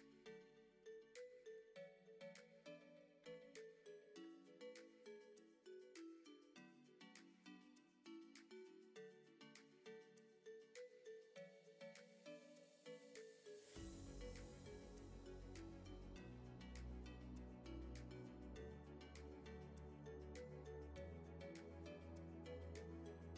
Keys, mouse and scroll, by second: 0.1 click, 0.8 e, 3.2 r, 4.1 r, 5.4 click, 5.7 e, 7.0 r, 7.5 g, 8.1 Tab, 9.1 click, 9.3 scroll up 3, 9.8 click, 10.2 click, 10.6 click, 11.0 click, 12.1 click, 13.1 click, 13.6 shift+middle click, 13.8 scroll up 1, 14.0 Tab, 14.3 1, 14.5 click, 14.7 shift+click, 15.0 g, 15.7 r, 16.2 click, 16.5 shift+click, 16.8 g, 17.5 click, 17.7 g, 18.3 scroll down 3, 18.6 middle click, 19.9 middle click, 20.3 scroll up 2, 20.5 z, 21.0-21.7 scroll up 6, 21.1 shift+middle click, 21.7 middle click, 22.2 shift+middle click, 22.4-22.7 scroll up 3, 22.7 a, 22.8 a.